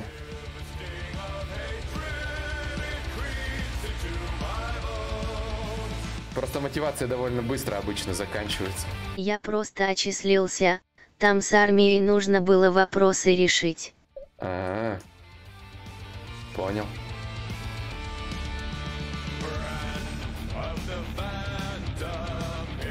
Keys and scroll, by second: 0.3 Return, 4.8 shift+d.